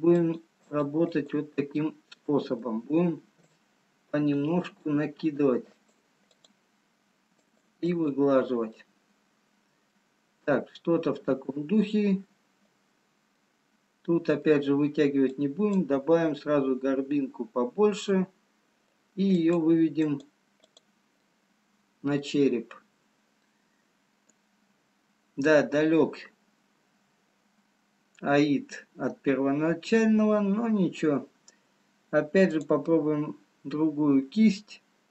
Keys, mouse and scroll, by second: 2.3 middle click, 4.1 click, 4.1-6.0 scroll up 1, 6.0 click, 7.5 click, 7.8 shift+click, 9.0 middle click, 10.4-11.4 scroll down 1, 12.2-13.5 scroll down 1, 13.8 middle click, 15.5 click, 16.7 middle click, 19.6 click, 20.4 click, 21.3 click, 21.3 middle click, 24.3-25.3 scroll down 1, 25.3-26.4 scroll up 2, 33.2 click.